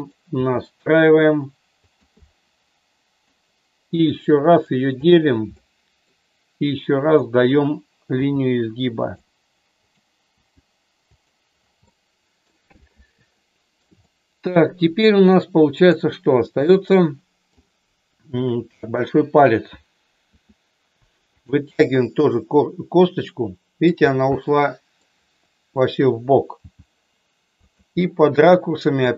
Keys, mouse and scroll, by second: 0.3 g, 1.8 click, 2.2-3.3 middle drag, 3.8 click, 4.4 right click, 5.6 middle click, 8.2 g, 10.3 g, 11.8 middle click, 13.4 middle click, 13.9 shift+middle click, 15.8 click, 16.7 middle click, 20.3 e, 21.3 click, 21.8-23.8 middle drag, 23.8 scroll down 1, 24.3 middle click, 26.6 g, 27.6 click, 27.9-29.1 middle drag.